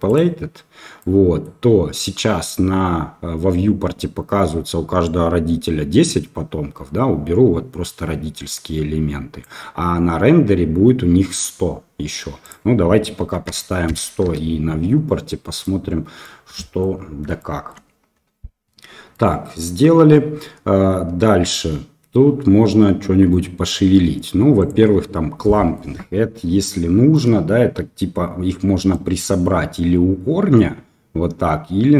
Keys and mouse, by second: 0.1-1.0 drag, 1.0 middle click, 6.0-9.4 drag, 12.4-14.7 drag, 15.0-15.6 middle drag, 16.2-16.8 middle drag, 17.3-17.7 shift+middle drag, 19.1 middle click, 24.6 click, 25.5 middle click, 26.5-27.1 shift+middle drag, 29.0-31.9 drag.